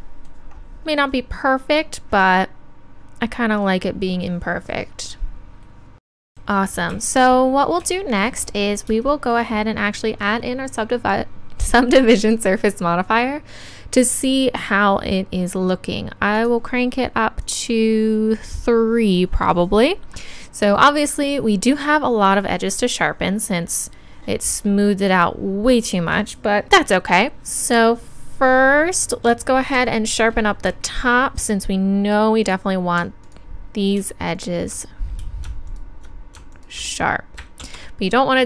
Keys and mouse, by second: 12.2-14.1 drag, 16.4-19.2 drag, 32.5-37.6 drag, 33.3-34.4 right drag, 37.6 ctrl+z.